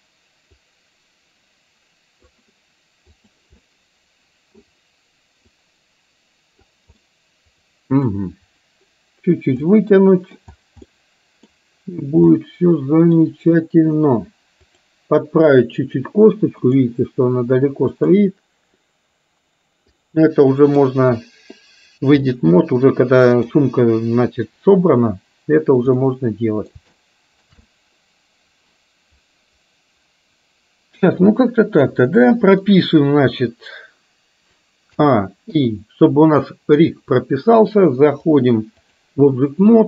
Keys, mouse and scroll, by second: 0.7-2.5 drag, 3.2 click, 3.7 middle click, 5.5-6.7 drag, 7.1-8.1 middle drag, 9.7-10.4 scroll up 1, 10.4-11.0 scroll down 1, 11.0 middle click, 12.5-13.2 middle drag, 14.7 click, 16.6 click, 17.9 click, 20.1-20.9 middle drag, 22.4-23.6 middle drag, 26.1 middle click, 27.0 shift+middle click, 27.7-32.7 middle drag, 35.0 a, 35.6 i, 38.4-39.1 drag.